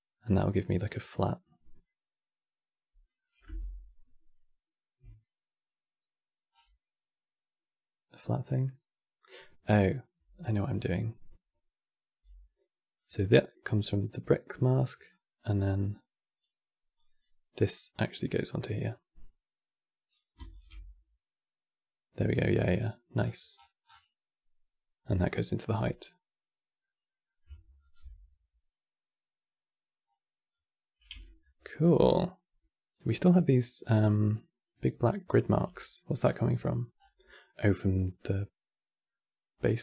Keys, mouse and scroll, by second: 0.3 scroll up 1, 0.9 scroll down 1, 1.5-2.9 middle drag, 2.9-3.5 scroll down 3, 4.0-6.2 middle drag, 6.2 scroll down 4, 6.5-9.7 middle drag, 10.3 click, 12.7 click, 14.8 click, 16.7 click, 17.4 click, 18.5 click, 20.2 ctrl+shift+click, 20.6-22.3 middle drag, 22.3 click, 24.9-26.5 drag, 26.5-27.5 middle drag, 27.5 ctrl+shift+click, 29.9-30.3 scroll up 1, 30.3-30.9 scroll down 1, 30.9-33.9 ctrl+middle drag, 35.5 middle click, 35.9-36.3 scroll down 4, 36.7 scroll down 4, 36.9-39.8 middle drag.